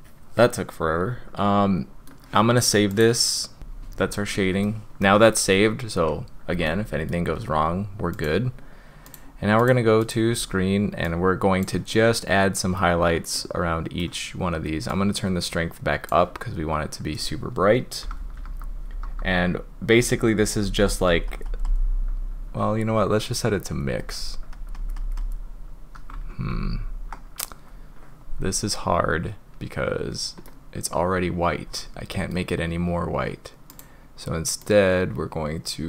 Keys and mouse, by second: 3.0-3.6 drag, 4.6 click, 6.6-7.1 shift+drag, 8.2-9.1 drag, 11.9-12.8 middle drag, 13.4 middle click, 14.9-16.1 drag, 18.0-19.1 typing, 19.9 click, 20.4 click, 20.6 click, 20.9 click, 21.1 click, 21.3 click, 21.5 click, 21.7 click, 23.4 click, 24.5 click, 24.8 click, 25.0 click, 25.2 right click, 26.3 ctrl+z, 26.5 ctrl+z, 30.5-32.3 middle drag, 33.7 right click.